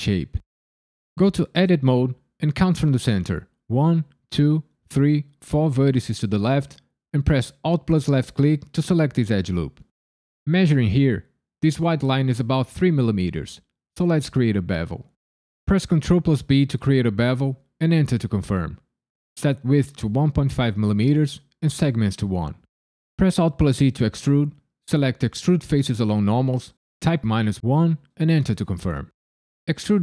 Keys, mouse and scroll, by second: 1.1 Tab, 7.5 alt+click, 8.2 alt+click, 15.6 ctrl+b, 17.9 KP_Enter, 19.3 click, 23.1 alt+e, 27.2 KP_Subtract, 27.5 KP_1, 28.1 KP_Enter.